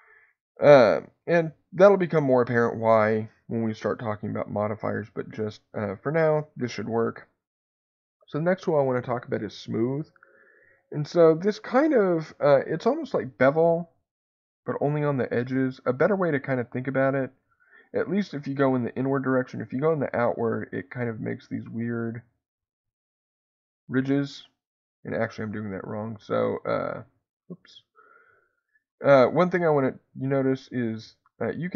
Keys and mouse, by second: 11.5 click, 14.5-20.5 drag, 21.7 click, 23.7-24.7 drag, 25.1 ctrl+z, 26.1 click, 26.9 ctrl+z, 27.3 ctrl+z, 28.3 click.